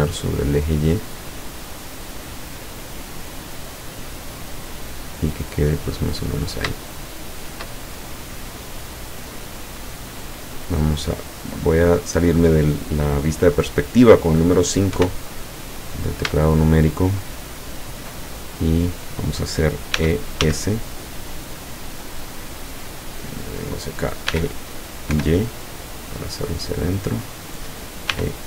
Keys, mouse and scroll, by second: 3.8 click, 4.3 scroll down 2, 4.6-5.5 middle drag, 5.5-5.9 scroll down 4, 5.9-6.5 scroll up 2, 7.0-7.8 shift+middle drag, 8.0-9.1 shift+middle drag, 9.2-10.3 scroll up 2, 10.4-10.8 scroll up 2, 10.9 scroll down 2, 15.0 KP_5, 15.6-16.3 scroll up 2, 16.5 shift+middle click, 17.1 shift+middle click, 17.5 shift+middle click, 18.4 shift+middle click, 19.0 middle click, 20.0 e, 20.4 s, 21.9 click, 22.7 middle click, 24.4 e, 25.2 y, 27.3 click, 28.2 e.